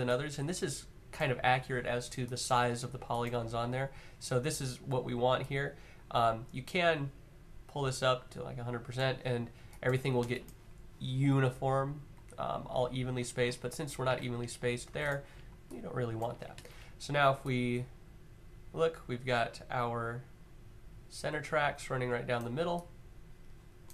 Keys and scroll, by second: 13.8-14.6 typing, 19.2 typing.